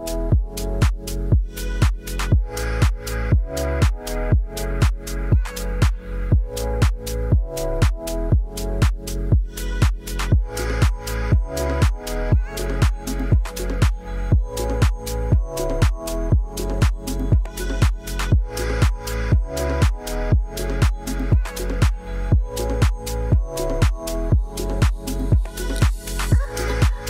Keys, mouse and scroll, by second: 1.1 Tab, 2.0 shift+click, 2.8 shift+click, 5.4 click, 8.1-9.1 drag, 9.2 click, 11.0 ctrl+2, 12.7 click, 15.9 click, 16.9 click, 17.8 shift+middle click, 18.6 shift+middle click, 20.1 Tab, 20.6 a, 22.0 click, 22.8 r, 26.6 g.